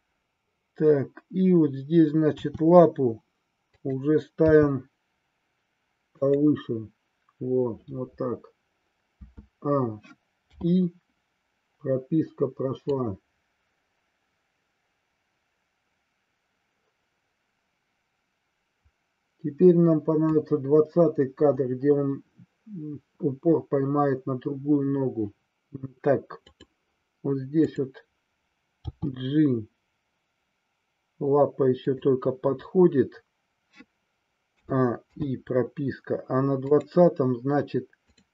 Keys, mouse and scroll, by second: 0.2-0.9 drag, 2.4 r, 3.9 click, 4.4 g, 6.3 click, 9.2 a, 10.5 i, 12.8-20.4 drag, 26.6 click, 29.0 g, 32.0 click, 34.5 a, 35.1 i, 36.7 click, 38.1 click.